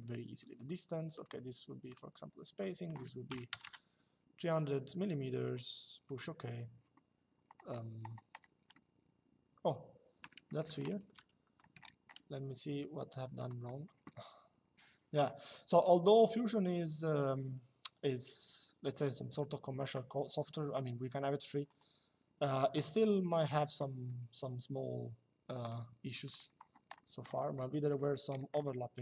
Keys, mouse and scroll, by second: 0.8 click, 3.0 KP_3, 5.8 click, 10.2 middle click, 13.1 click, 21.4 click, 22.5 Escape, 23.0 click, 25.3 click, 27.2 shift+middle click.